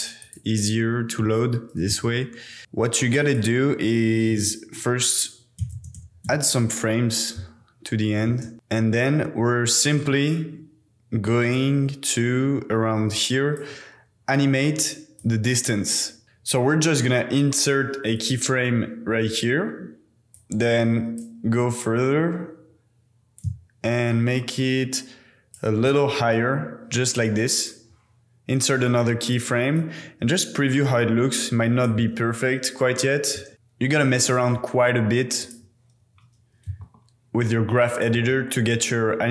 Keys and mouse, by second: 1.9 KP_0, 2.6 space, 3.3 click, 6.0 KP_0, 7.4 space, 8.3 space, 8.5 space, 10.2 drag, 14.0-15.2 middle drag, 16.2-18.2 middle drag, 18.3-20.4 middle drag, 21.3 middle click, 23.6-25.6 shift+middle drag, 27.5 click, 29.3 click, 29.8 click, 32.1 space, 33.5 space, 33.5-35.5 drag, 36.7 a, 36.8 KP_Decimal, 38.1 a, 38.3 KP_Decimal.